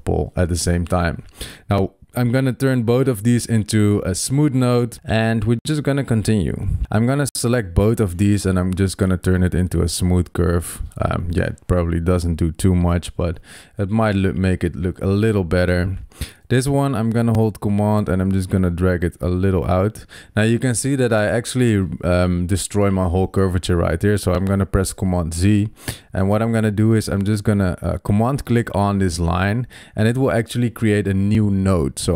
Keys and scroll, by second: 24.9 super+z.